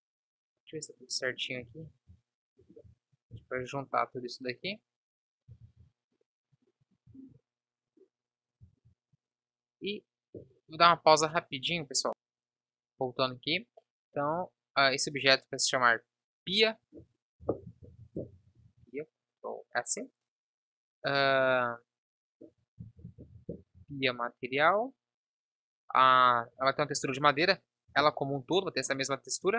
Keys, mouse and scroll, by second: 1.8 ctrl+z, 3.3 ctrl+j, 5.6 ctrl+z, 7.3 ctrl+s, 12.5 KP_1, 18.8 ctrl+s, 22.2-23.9 drag, 23.9 ctrl+s.